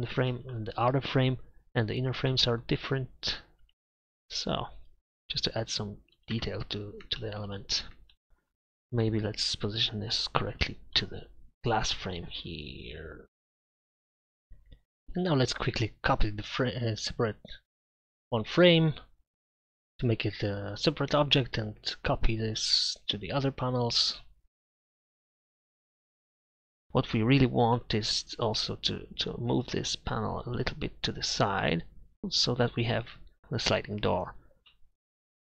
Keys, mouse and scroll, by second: 3.7 Tab, 4.4-5.6 right drag, 5.6 e, 6.4 Tab, 8.3 KP_Divide, 12.7 middle click, 12.9 middle click, 13.2 middle click, 15.2 right click, 15.3 Tab, 16.7-17.3 ctrl+KP_Add, 18.5 shift+d, 19.8 p, 20.5 Tab, 21.0-21.8 right drag, 25.4-26.3 drag, 31.2-33.2 drag.